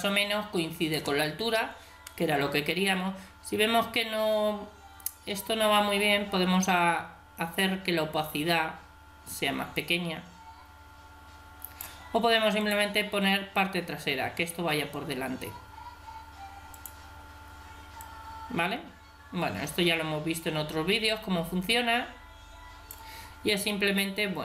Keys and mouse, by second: 5.7-7.7 drag, 12.6-14.4 drag, 16.7-19.7 drag, 23.5-24.4 middle drag.